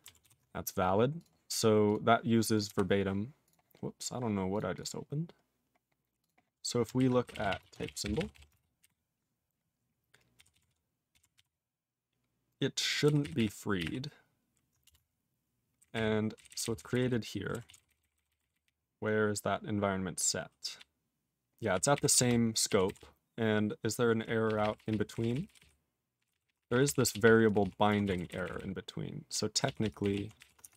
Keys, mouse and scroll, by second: 0.2 ctrl+s, 1.2 click, 1.2 click, 1.9 click, 2.7 q, 3.4 click, 3.5 click, 3.7-4.5 scroll up 5, 4.5 click, 4.6 click, 4.7 click, 4.8 click, 5.1-5.8 scroll up 3, 6.2 click, 6.3 click, 7.0 ctrl+r, 7.0-8.8 typing, 10.4 ctrl+s, 10.5 ctrl+s, 11.2 ctrl+s, 11.4 ctrl+s, 13.1 ctrl+r, 13.2 ctrl+r, 13.4 ctrl+r, 13.8 ctrl+r, 14.9 Return, 15.8 ctrl+n, 15.9 ctrl+n, 16.4 ctrl+n, 16.5 ctrl+n, 16.6 ctrl+n, 16.8 ctrl+n, 16.9 ctrl+n, 17.7 ctrl+s, 17.8 ctrl+n, 17.9 ctrl+n, 18.0 ctrl+n, 18.2 ctrl+n, 18.3 ctrl+b, 18.4 ctrl+n, 18.6 ctrl+n, 18.6-20.5 ctrl+n, 20.8-21.7 ctrl+p, 21.9 ctrl+n, 22.1 ctrl+space, 22.7 ctrl+e, 22.9 ctrl+g, 23.0-24.2 ctrl+p, 24.5 ctrl+p, 24.6 ctrl+p, 24.8 ctrl+p, 24.9 ctrl+p, 25.2 ctrl+p, 25.3 ctrl+p, 25.5 ctrl+p, 25.6 ctrl+p, 26.2 ctrl+p, 26.3 ctrl+a, 26.3 ctrl+p, 26.4 ctrl+p, 26.6 ctrl+p, 26.6 ctrl+e, 26.7 ctrl+p, 26.8 ctrl+p, 27.0 ctrl+p, 27.1 ctrl+p, 27.2 ctrl+p, 27.5 ctrl+p, 27.6 ctrl+p, 28.0 ctrl+s, 28.2 ctrl+n, 28.3 ctrl+n, 28.5 ctrl+n, 28.6 ctrl+n, 29.1 ctrl+n, 30.4 ctrl+o, 30.6 Tab, 30.7 /.